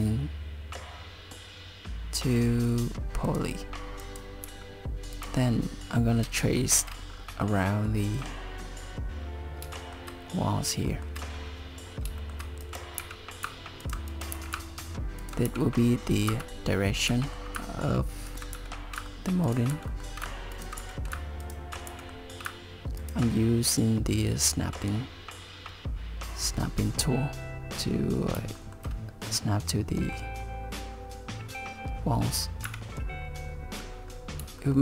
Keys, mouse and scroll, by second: 4.0 click, 4.5 g, 6.6 shift+middle click, 7.1-7.5 scroll down 3, 9.8 shift+middle click, 10.9 shift+middle click, 11.9 scroll up 2, 12.2 shift+middle click, 12.6 click, 13.0 g, 14.1 click, 14.4 g, 15.5 g, 17.1 e, 18.5 e, 19.7 e, 20.8 e, 21.9 e, 28.6 shift+middle click, 29.7 middle click, 32.7 KP_7, 34.1-34.4 scroll up 3, 34.6 shift+middle click.